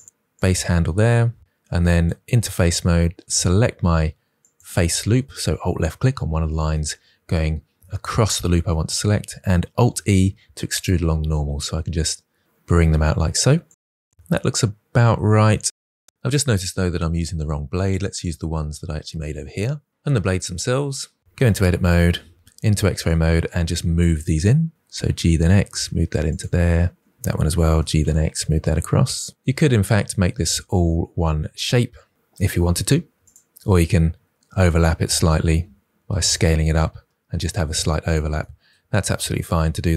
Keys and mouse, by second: 0.6 click, 1.5 3, 4.3 alt+click, 8.5 middle click, 9.7 alt+e, 12.9 click, 16.0 Tab, 16.1 Tab, 16.6 KP_1, 17.6 g, 17.9 x, 19.1 click, 21.2 Tab, 22.3 alt+a, 22.3 alt+z, 22.9 click, 24.1 g, 24.3 x, 25.8 click, 28.1 g, 28.3 x, 33.1 Tab, 34.7 Tab, 35.5 s, 35.7 shift+z, 36.6 click, 37.6 Tab, 38.0 click, 39.4 alt+z.